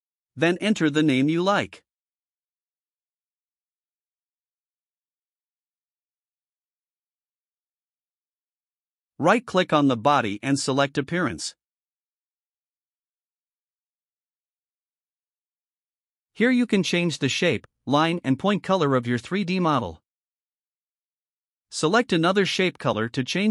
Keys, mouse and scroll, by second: 0.4-2.5 typing, 4.2-6.1 typing, 6.4 Return, 10.6 right click, 16.0 click, 20.6 click, 22.8 click.